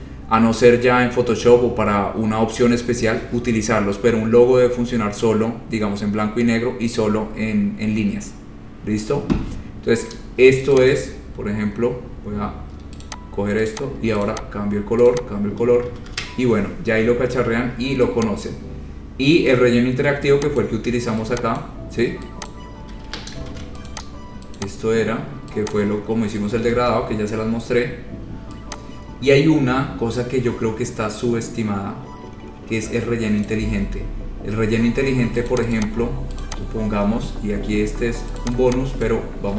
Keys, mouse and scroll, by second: 10.6 scroll, 11.0 shift+click, 13.3 click, 13.9 click, 14.2 shift+click, 14.5 click, 14.7 shift+click, 15.3 click, 15.7 shift+click, 16.1 ctrl+z, 16.3 ctrl+z, 19.6 click, 20.8 click, 21.9 click, 22.7 click, 23.1 Escape, 23.3 Escape, 23.7 ctrl+z, 24.1 click, 24.8 click, 26.0 click, 26.5 scroll down 4, 26.6-26.9 scroll, 27.0 ctrl+z, 27.5-27.9 scroll, 33.7 click, 34.3-35.0 scroll, 35.7 click, 35.9 click, 36.1-36.5 scroll, 36.6 click, 37.0-37.7 scroll, 38.6 click, 39.3 click.